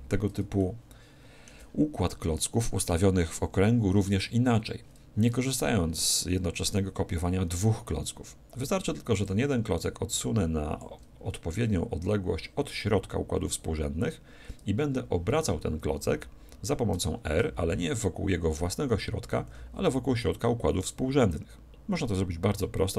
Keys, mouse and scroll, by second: 0.6-2.5 middle drag, 9.2-11.2 drag, 17.6 r.